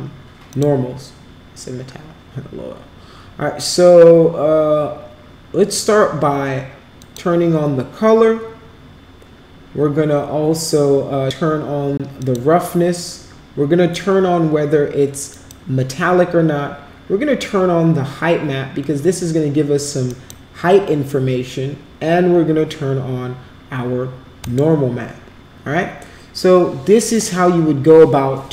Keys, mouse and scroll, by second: 0.5 click, 6.9 click, 12.2 click, 15.3 click, 20.1 click, 24.4 click, 25.1-25.4 scroll down 2, 25.5 scroll up 2.